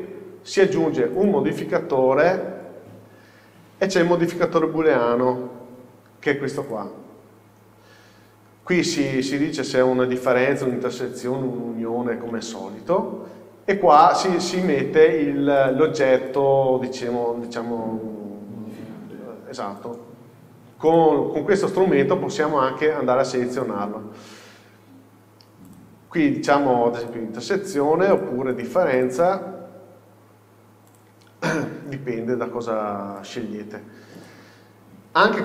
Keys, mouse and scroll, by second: 1.3-10.8 drag, 14.6-16.5 drag, 20.9 click, 25.7-28.7 drag, 29.0-33.4 drag, 34.3-35.4 drag.